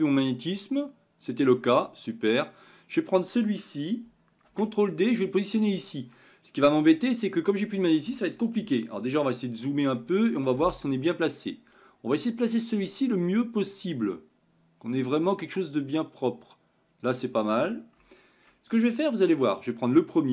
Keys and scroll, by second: 5.1 ctrl+d.